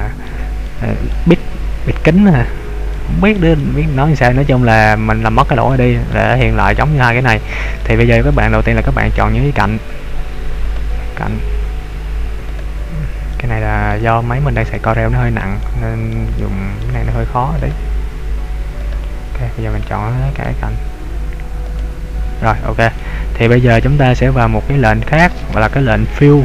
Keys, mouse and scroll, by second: 0.6 middle click, 2.9 middle click, 3.6 shift+middle click, 4.8 middle click, 5.8 shift+middle click, 6.5 middle click, 7.8 middle click, 8.4 shift+middle click, 10.8 right click, 12.4 right click, 13.4 middle click, 14.1 shift+middle click, 14.8 middle click, 15.6 shift+middle click, 16.4 middle click, 17.7 right click, 18.9 shift+right click, 20.6 right click, 21.8 shift+right click, 22.5-23.1 scroll down 2, 23.1 middle click.